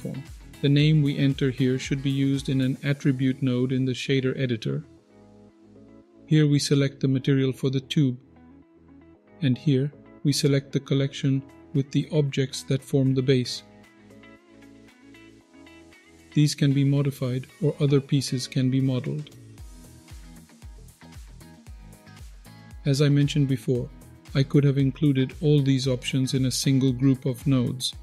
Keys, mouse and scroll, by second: 12.2 click, 14.8 click, 15.4 click, 15.5-15.9 scroll down 2, 15.7-16.1 scroll up 2, 15.9 middle drag, 16.4 click, 17.5 click, 18.1 click, 18.5 click, 19.1 scroll up 1, 19.2-19.9 middle drag, 20.0 click, 20.8 click, 22.2 drag, 22.4-22.7 scroll down 2, 22.5-23.1 middle drag, 23.4-25.2 scroll up 2, 27.0-27.8 middle drag.